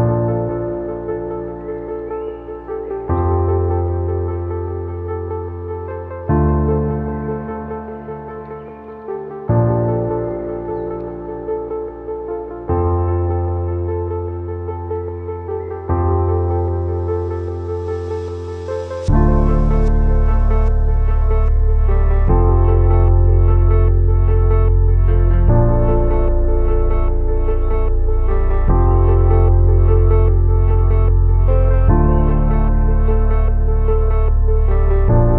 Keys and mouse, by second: 0.2-0.7 shift+drag, 1.7 ctrl+s, 2.3-3.0 drag, 4.0 Tab, 5.4 3, 6.4 KP_3, 7.2 shift+d, 8.3 p, 8.9 Tab, 9.4 click, 10.6 KP_3, 10.7 Tab, 11.6-13.9 typing, 12.4 shift+drag, 14.9-17.4 drag, 17.5 shift+click, 17.8 a, 18.0 b, 18.6 shift+drag, 19.4-20.5 drag, 20.6 a, 21.1 a, 21.4 shift+click, 21.7 e, 22.4 click, 23.7 s, 26.3-26.8 shift+drag, 27.2 ctrl+r, 30.2-31.8 shift+drag, 32.3 ctrl+r.